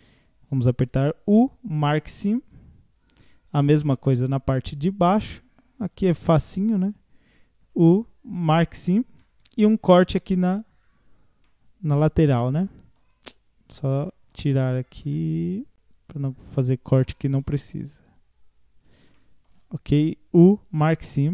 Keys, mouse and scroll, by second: 3.0 scroll down 1, 3.2 middle click, 4.1-4.7 scroll up 2, 4.7-5.9 scroll down 1, 5.9 alt+click, 7.7 u, 9.2-10.4 middle drag, 10.4 alt+click, 11.1-11.4 scroll down 1, 11.4-13.2 middle drag, 13.2-13.8 scroll up 1, 13.8 scroll down 1, 14.0-15.9 middle drag, 15.9 shift+click, 16.9 shift+click, 18.1 shift+click, 19.2 middle click, 20.0 u, 21.1 scroll down 3.